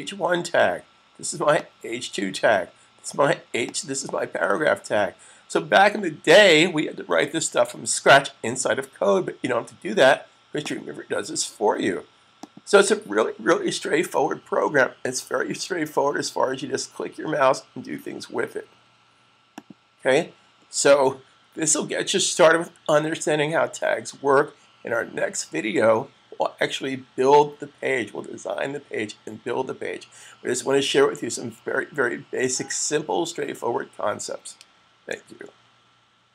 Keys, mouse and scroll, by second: 10.4 click, 12.5 click, 19.4 click.